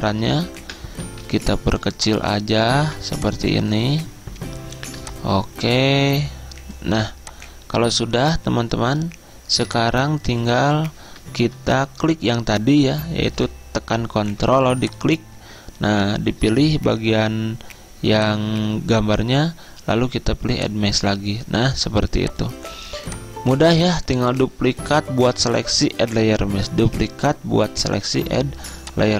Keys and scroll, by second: 0.7 Return, 11.5 Return, 22.9 z.